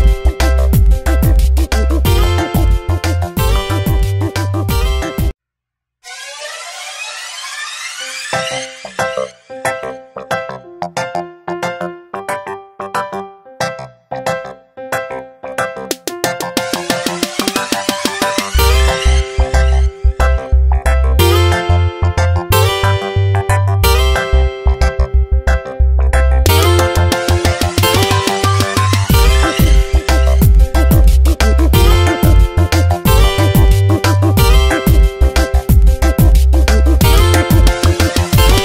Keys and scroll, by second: 1.8 Tab, 4.1 v, 10.0 Tab, 10.1 space, 11.8 v, 14.6 Tab, 16.7 v, 22.4 space, 28.4 space, 33.3 space, 36.8 space, 38.0 space.